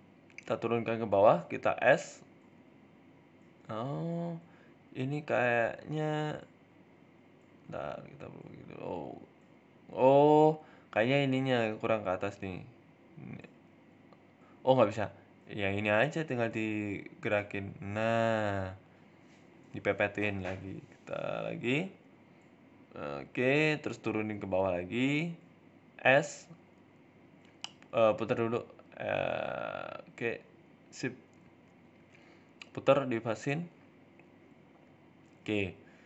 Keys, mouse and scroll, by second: 0.2 g, 0.9 s, 1.5-2.5 scroll up 8, 1.7 shift+middle click, 2.5 shift+middle click, 2.9 right click, 3.4 right click, 4.4 g, 7.7 scroll up 2, 8.0 s, 8.8 shift+middle click, 9.5 right click, 10.0 shift+middle click, 10.6 Tab, 10.9 shift+middle click, 11.5 Tab, 11.8 right click, 12.0 Tab, 12.3 shift+middle click, 12.6 scroll up 1, 13.4 g, 14.4 Tab, 14.5 scroll down 3, 14.7 shift+middle click, 15.4 g, 20.3 right click, 20.8 g, 21.8-22.9 scroll down 7, 22.0 middle click, 22.4 middle click, 22.9 middle click, 23.2 right click, 23.6-27.2 typing, 25.6-25.9 scroll up 9, 25.9 shift+middle click, 28.1-28.8 scroll up 3, 28.6 g, 29.9 r, 30.7 scroll up 2, 30.8 shift+middle click, 31.2 g, 32.2 r, 33.1 g, 35.5 r.